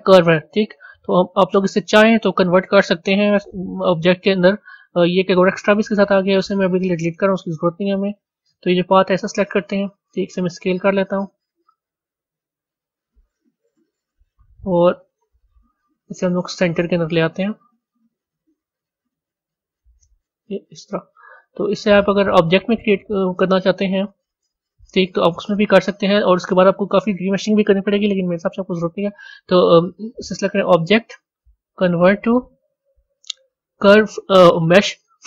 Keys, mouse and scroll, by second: 3.9 click, 5.1 click, 6.3-8.4 right drag, 8.4 click, 9.4-10.3 scroll down 3, 10.3 s, 13.3-13.8 scroll down 6, 14.9 KP_7, 16.4 g, 23.0-24.1 middle drag, 24.1 scroll up 3, 26.2 a, 27.3 click, 30.1-33.1 drag.